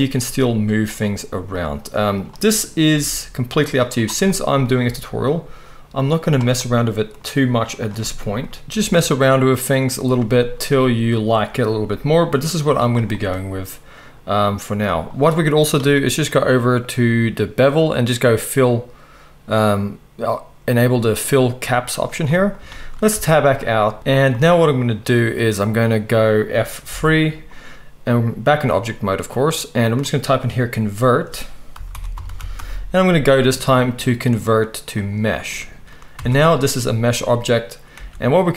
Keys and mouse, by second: 2.1 click, 2.2-3.9 middle drag, 2.9 g, 3.9 click, 4.0-21.6 middle drag, 4.8 g, 10.3 g, 11.8 g, 21.6 click, 23.1 Tab, 24.0 g, 26.9 F3, 35.6-38.5 middle drag, 36.1 Tab, 37.9 Tab.